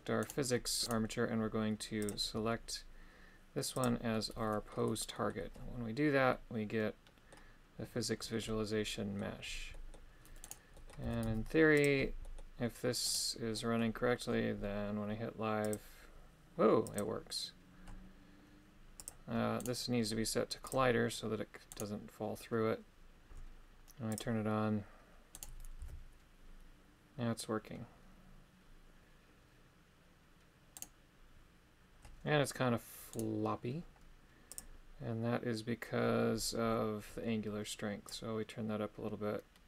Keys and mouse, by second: 0.3 right click, 0.8 g, 2.1 click, 4.2 middle click, 5.2 middle click, 6.4-7.4 middle drag, 8.5 middle click, 9.8 middle click, 10.5 right click, 10.8 middle click, 11.1 g, 11.3 z, 11.8 click, 12.3 middle click, 13.1 right click, 13.6 middle click, 15.7 click, 17.0 click, 19.0 click, 19.7 right click, 20.7 click, 21.8 right click, 24.2 click, 25.5 right click, 25.9 g, 30.9 right click, 33.2 right click, 34.6 click, 38.2-39.6 drag.